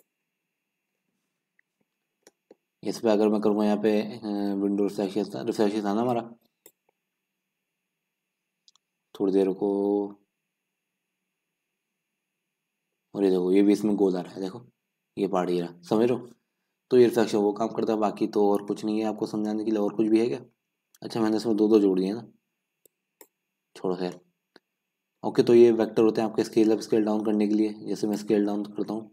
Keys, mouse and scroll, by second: 0.0 click, 1.4 KP_Decimal, 2.0-2.3 scroll down 4, 2.3-6.9 middle drag, 6.9-12.2 drag, 12.9 scroll up 2, 13.1-16.0 middle drag, 16.0-16.4 scroll down 4, 16.4-17.5 scroll up 1, 17.5-18.4 scroll up 1, 18.4-19.1 scroll up 1, 19.1-19.7 scroll up 1, 19.7-20.6 scroll up 1, 20.6-21.5 scroll up 1, 21.5-22.4 scroll up 1, 22.4-23.0 scroll up 1, 23.0 scroll up 1, 23.2-28.6 drag, 28.6-29.1 middle drag.